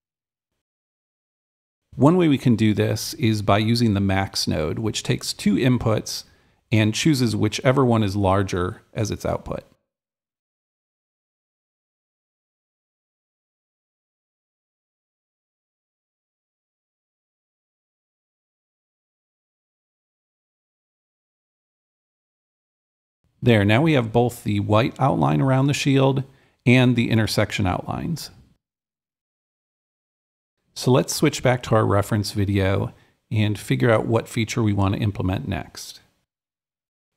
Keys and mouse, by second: 0.1 click, 1.4 click, 4.4-8.2 alt+drag, 6.7-8.0 typing, 8.9 Left, 10.6 Return, 10.9-12.9 drag, 13.0-15.6 drag, 15.7-18.7 drag, 19.5-21.5 drag, 22.5-24.5 drag, 24.7-36.6 right drag, 24.7 a, 28.6 d.